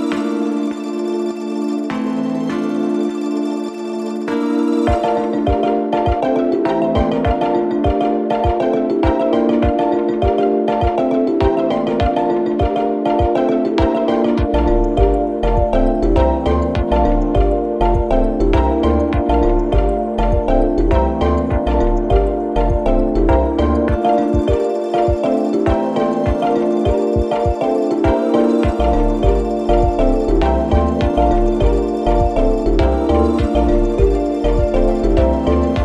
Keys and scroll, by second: 8.6 2, 9.4 4, 12.5 shift+f, 14.2 3, 14.9 Delete, 16.1 F3, 16.7 shift+i, 20.9 Delete, 23.4 4, 24.9 4, 28.4 3, 34.7 ctrl+z, 35.6 3.